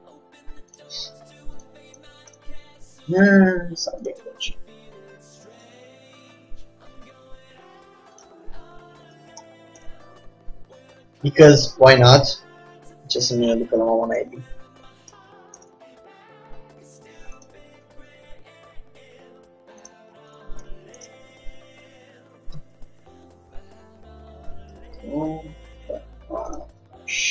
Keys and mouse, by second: 4.4-5.7 drag, 5.7 shift+d, 9.6-12.1 middle drag, 12.1-15.6 drag, 15.6-18.7 middle drag, 18.7-22.1 drag, 18.7 g, 22.1-26.0 middle drag, 26.0 s, 26.9 g.